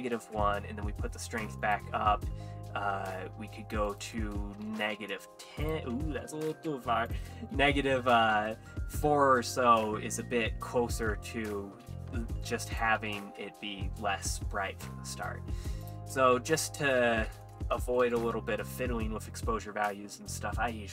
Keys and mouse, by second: 1.6 click, 3.9-5.0 drag, 5.7 click, 7.1-8.3 drag, 12.7 click, 15.2 click, 15.9-18.2 drag, 18.2 BackSpace.